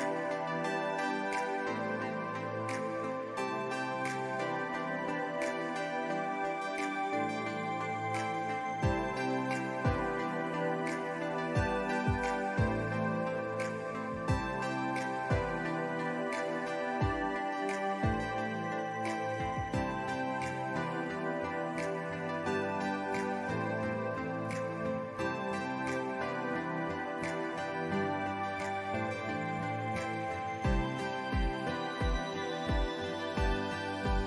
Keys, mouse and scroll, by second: 0.1 click, 2.2 ctrl+z, 2.4 click, 3.2-4.7 alt+drag, 5.0 click, 6.4 ctrl+z, 6.5 alt+scroll up 1, 6.8 click, 8.4 click, 13.5-14.6 drag, 16.3 click, 16.9 alt+scroll down 1, 17.1 click, 17.1 space, 17.8 scroll up 1, 18.3 click, 20.1 ctrl+z, 20.2 click, 21.7 click, 23.9 click, 25.8 ctrl+s, 25.8 alt+scroll down 1, 26.0 click, 26.3 scroll up 1, 26.5 scroll down 1, 28.4 alt+Num_Lock, 28.5 alt+scroll up 1, 29.0 typing, 31.8 alt+scroll down 1, 32.7 ctrl+s.